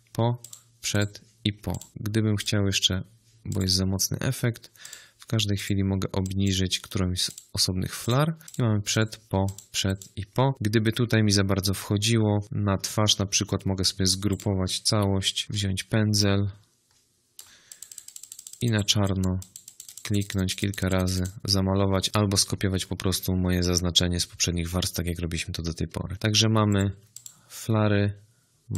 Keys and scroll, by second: 14.9 g.